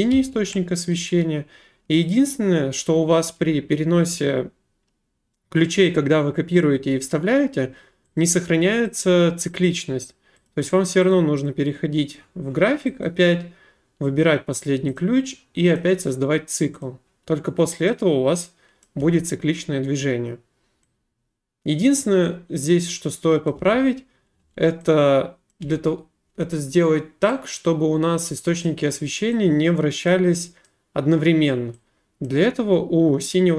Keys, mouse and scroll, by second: 0.1 ctrl+v, 8.2 click, 9.0 click, 9.6 click, 10.5 click, 11.1 click, 11.4 click, 13.0 middle click, 15.0 click, 15.8 middle click, 16.8 click, 18.8 click, 19.0 space, 23.5 click, 23.6 space, 24.4 space, 25.5 click, 25.6 space, 26.3 space, 28.6 middle click, 30.1 click, 30.6 right click, 32.2 click.